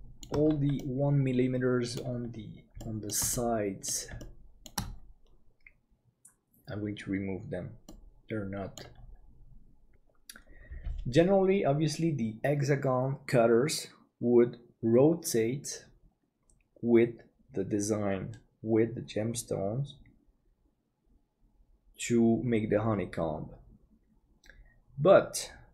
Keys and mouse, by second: 0.8-2.0 middle drag, 2.8 shift+middle click, 3.3 middle click, 4.2 shift+middle click, 7.9 middle click, 8.4 click, 9.7 middle click.